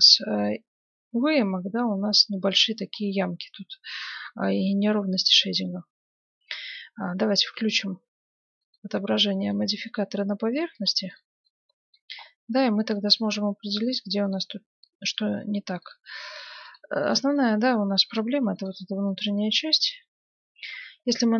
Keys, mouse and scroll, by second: 2.8-3.6 scroll up 1, 3.6-6.9 middle drag, 5.0 Tab, 8.6-10.2 drag, 9.3-10.9 middle drag, 10.7 ctrl+Tab, 11.4-14.8 middle drag, 12.5 a, 15.9-20.9 right drag, 17.3-19.3 middle drag, 19.6-21.3 middle drag.